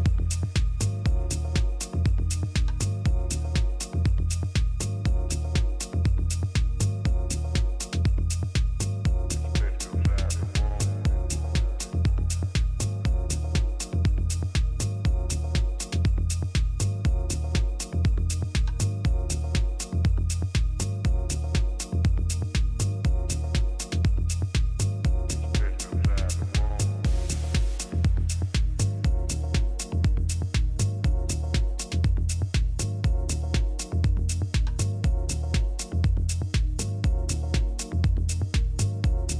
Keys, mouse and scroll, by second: 0.1 b, 3.1 g, 7.7 a, 8.9 b, 11.4 g, 14.9 a, 15.4 b, 16.5 g, 18.2 a, 19.2 b, 21.1 a, 21.4-23.5 middle drag, 31.2 KP_3, 32.4 ctrl+KP_1, 33.6 middle click, 34.1 z.